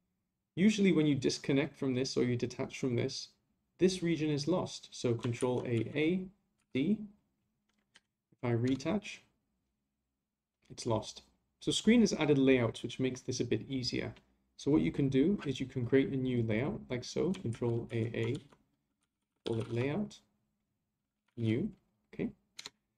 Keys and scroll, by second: 5.4 ctrl+a, 17.5 ctrl+a.